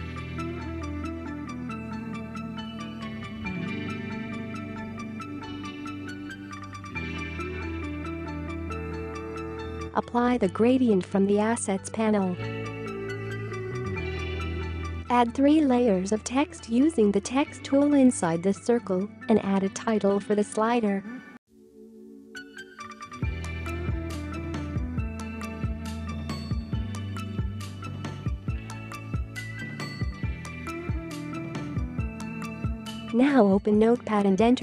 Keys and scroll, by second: 16.8 6, 18.9 6, 20.9-21.3 typing, 25.2-27.5 typing, 33.4-33.7 typing, 34.1 Return.